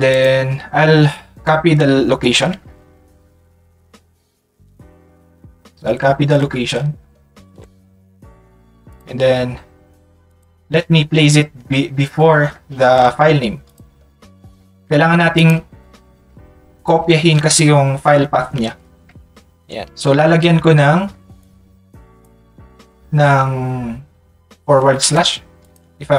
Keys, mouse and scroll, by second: 0.1 click, 1.4 click, 8.9 click, 10.2 click, 13.6 click, 21.4-22.5 drag, 25.6 click.